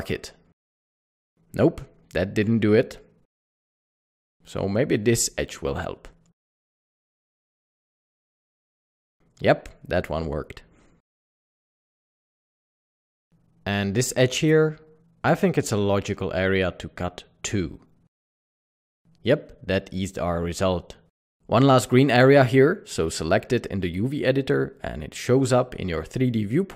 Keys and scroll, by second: 0.5 typing, 7.3 typing, 12.5 typing, 17.5 typing, 22.6 typing.